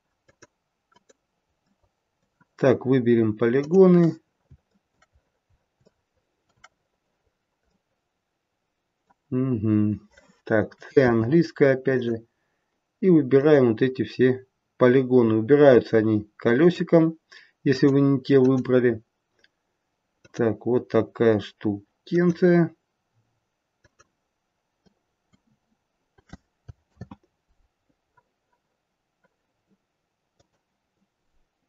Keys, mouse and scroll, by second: 1.6 middle click, 3.7 click, 4.1-4.5 scroll up 3, 4.5 shift+middle click, 5.0-5.8 scroll down 6, 5.9 shift+middle click, 6.7-7.2 scroll up 2, 7.2-7.7 scroll down 1, 7.7 middle click, 9.3-9.7 scroll up 1, 11.0 c.